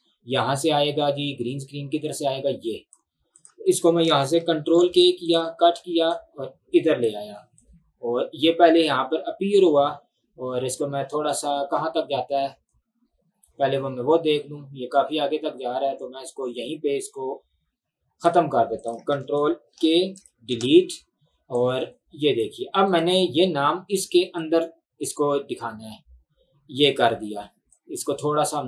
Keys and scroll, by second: 4.8 ctrl+k, 5.7 Delete, 19.7 ctrl+k, 20.6 Delete.